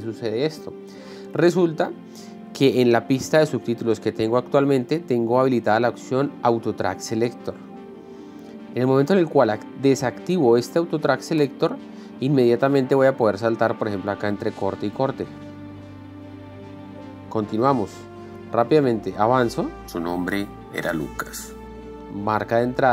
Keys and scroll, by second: 0.5 Down, 0.8 Up, 13.5 Up, 14.6 Down, 16.0 Down, 16.7 Down, 17.0 Up, 20.0 l, 22.1 k, 22.7 l.